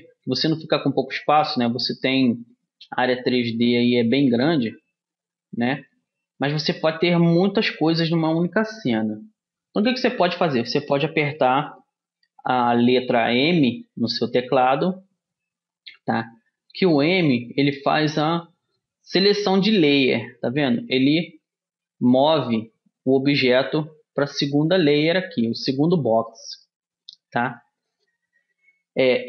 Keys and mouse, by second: 5.7-13.2 middle drag, 13.9 m, 17.2 m, 26.7 middle click, 27.1 click, 27.7-29.2 middle drag.